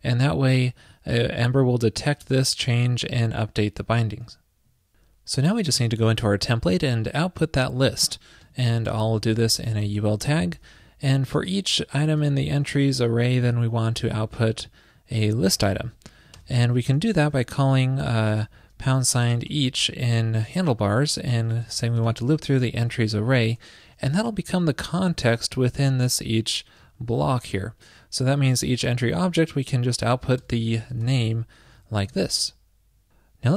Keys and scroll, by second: 4.3 super+s, 9.8 ctrl+shift+<, 12.4 ctrl+shift+<, 25.9 super+Left, 27.0 shift+super+Right, 31.8 super+Right, 32.0 super+s.